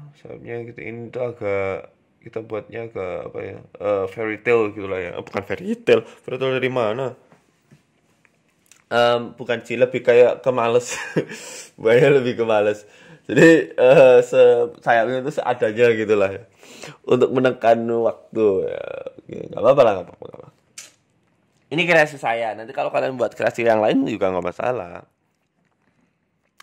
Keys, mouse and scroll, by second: 0.7 scroll up 3, 0.8 Tab, 1.5 click, 2.2 middle click, 2.8 e, 3.1 s, 4.5 e, 5.3 ctrl+z, 5.6 s, 6.3 e, 7.5 e, 7.9 s, 8.8 e, 10.1-10.8 scroll down 3, 10.5 middle click, 12.1 KP_3, 12.8 click, 13.7 Delete, 14.5-15.4 scroll up 4, 15.4 click, 17.9 Tab, 18.2 middle click, 18.5 scroll down 1, 19.0 Tab, 19.0 scroll down 2, 19.3 scroll up 2, 20.1 Tab, 20.1 scroll up 1, 21.1 click, 21.6 click, 21.9 r, 24.0 Tab, 24.6 KP_1, 25.2 Tab, 25.7 r.